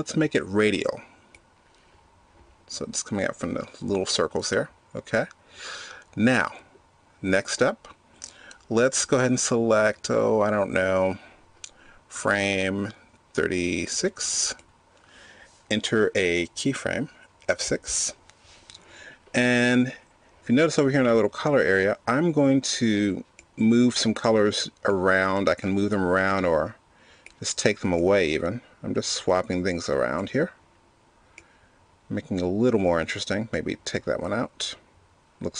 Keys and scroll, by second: 18.1 F6.